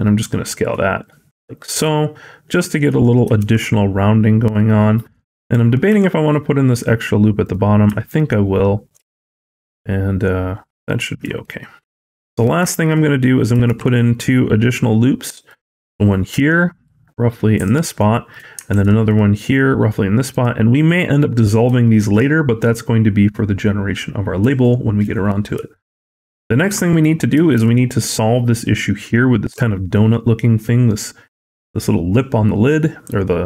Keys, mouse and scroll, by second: 3.3 ctrl+r, 5.7 s, 7.9 alt+click, 11.3 shift+middle click, 11.8-12.5 scroll down 2, 12.5 shift+middle click, 13.0-13.4 scroll up 1, 13.5 ctrl+r, 17.8 shift+middle click, 18.8 ctrl+r, 21.2-21.7 scroll down 3, 21.7 shift+middle click, 24.5 shift+middle click, 24.9-25.4 scroll up 4, 25.6 shift+middle click, 25.8-26.1 scroll up 2, 26.3 shift+middle click, 26.6-27.2 scroll up 1, 27.4 ctrl+r.